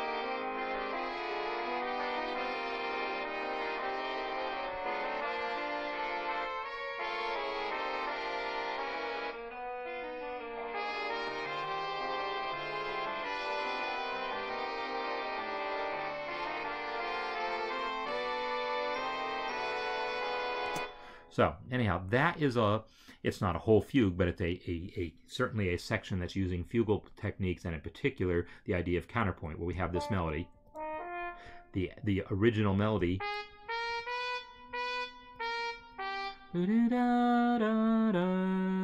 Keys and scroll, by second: 20.6 space, 30.5 Right, 33.4 Right.